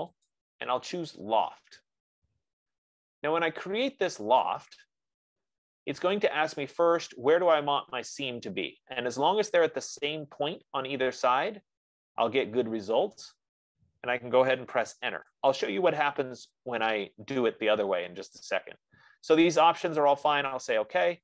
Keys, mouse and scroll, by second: 4.8 click, 15.8 Return, 21.1-21.2 drag.